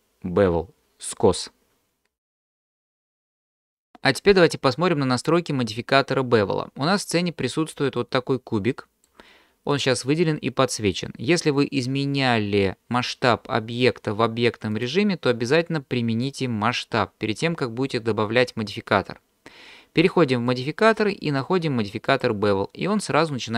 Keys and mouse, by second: 7.2-7.8 shift+middle drag, 8.0-9.1 middle drag, 14.9-17.3 drag, 20.5-22.3 drag.